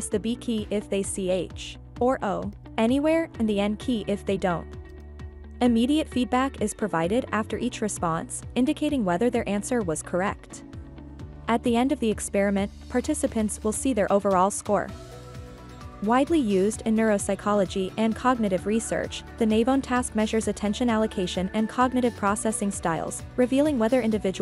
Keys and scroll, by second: 0.4 n, 2.5 b, 4.7 n, 6.8 b, 9.0 n, 16.8-18.6 typing, 20.5 n, 22.7 b.